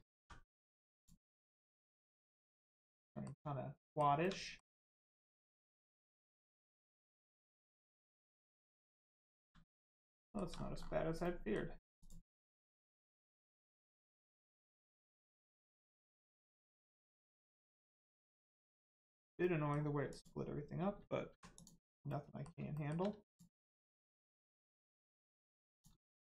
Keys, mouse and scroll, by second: 0.9 click, 1.4-1.8 scroll down 1, 2.1 middle click, 3.7 shift+middle click, 4.8 middle click, 4.9 middle click, 6.8 shift+middle click, 7.6 middle click, 7.6 middle click, 9.0 shift+middle click, 9.6 middle click, 9.6 middle click, 9.9 scroll up 1, 10.2 shift+middle click, 10.7-11.1 scroll up 1, 11.2 middle click, 11.9 click, 12.2 scroll up 1, 13.2 middle click, 14.6 shift+middle click, 15.8 middle click, 15.9 middle click, 16.5 shift+middle click, 17.2 scroll down 1, 17.6 middle click, 18.0 shift+middle click, 19.4 middle click, 19.4 middle click, 20.0 click, 21.2 1, 21.5 click, 22.0 middle click, 22.6 shift+middle click, 23.2 click, 23.6 middle click, 25.7 click, 25.9 shift+middle click.